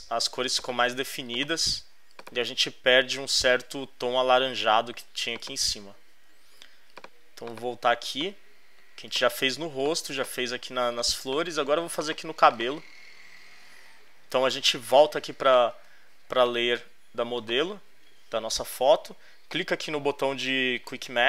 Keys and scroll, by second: 8.0 alt+space, 8.7 space, 9.6 space, 15.9 space.